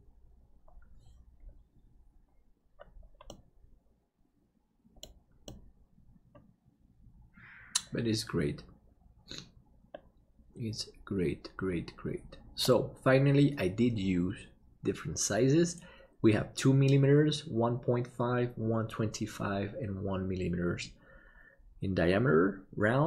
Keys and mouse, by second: 3.3-5.0 middle drag, 5.4-13.1 middle drag.